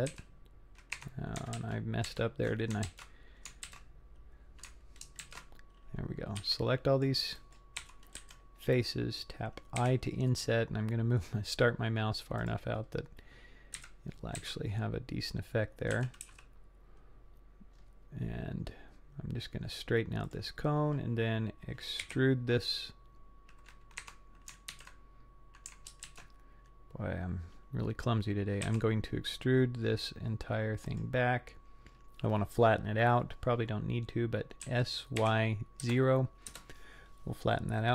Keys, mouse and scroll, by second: 0.1 s, 1.6 ctrl+z, 2.1 ctrl+z, 2.9 ctrl+z, 3.7 ctrl+z, 5.2 ctrl+shift+z, 6.4 c, 7.8 3, 8.2 c, 9.8 i, 13.0-13.7 scroll down 3, 13.9 KP_3, 14.4 z, 15.3 scroll up 2, 16.0 g, 22.0 i, 24.7 ctrl+z, 26.1 ctrl+shift+z, 28.6 e, 34.6 s, 37.5 middle click.